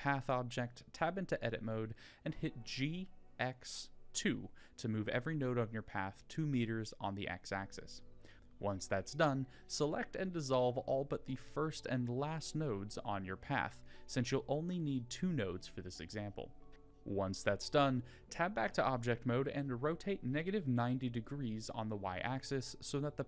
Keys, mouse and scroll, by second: 1.6 g, 6.9 click, 7.3 click, 8.6 x, 11.7 click, 12.3 click, 13.0 click, 13.9 x, 16.4 a, 16.8 Tab, 19.0 r, 20.7-21.2 middle drag, 22.7 r.